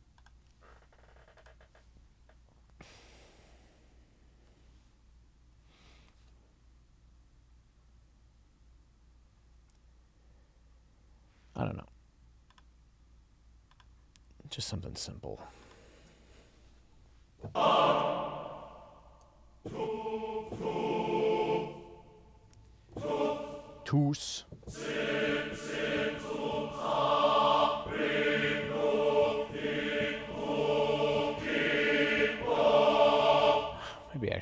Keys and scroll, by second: 19.3 Up.